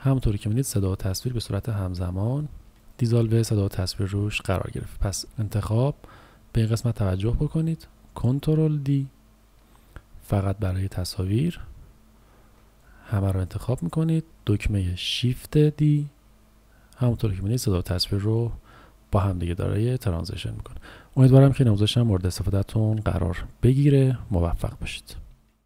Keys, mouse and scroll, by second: 2.9 click, 5.2 z, 8.9 ctrl+d, 12.4 ctrl+z, 12.9 click, 14.2 z, 18.4 click.